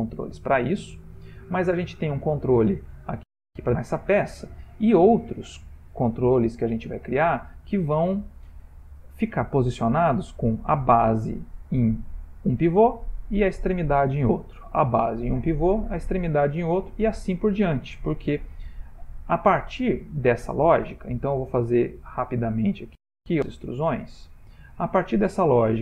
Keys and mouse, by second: 20.1 e, 22.7 e, 24.5 e.